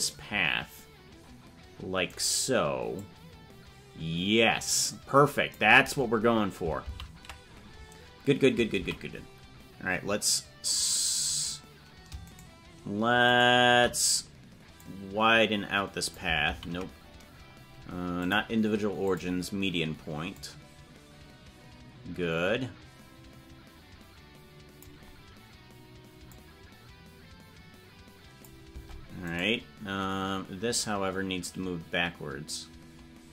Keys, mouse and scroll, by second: 2.9-5.5 drag, 6.8 ctrl+z, 14.7-16.1 drag, 16.5 ctrl+z, 18.2 click, 20.3-24.8 drag, 26.3-28.4 drag, 28.7 Tab, 29.4-30.7 right drag, 30.7-33.3 drag.